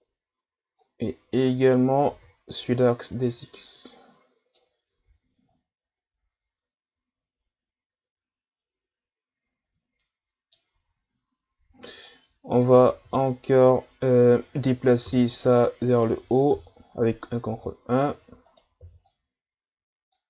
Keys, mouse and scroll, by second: 0.8-1.9 drag, 1.9 a, 2.1 a, 2.9-5.0 drag, 5.0 Tab, 10.0-10.8 middle drag, 10.8 Tab, 12.0 click, 12.9 ctrl+z, 15.1 ctrl+KP_3, 16.5 ctrl+KP_1, 17.6 z, 18.5 right click, 18.8 b.